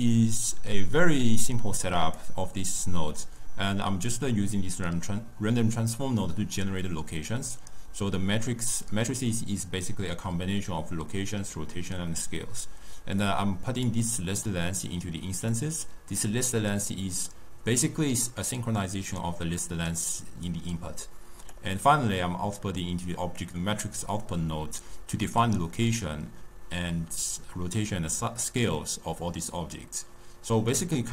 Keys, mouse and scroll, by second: 1.4 click, 13.1 click, 15.4-18.5 drag, 19.1-22.1 drag.